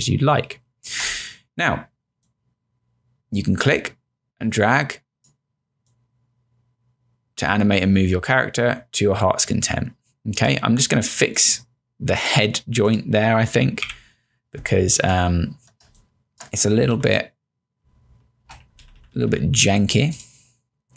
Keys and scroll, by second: 13.9 q, 15.9 space, 17.0 Right, 17.9 Down, 18.6 Left, 19.7 Down.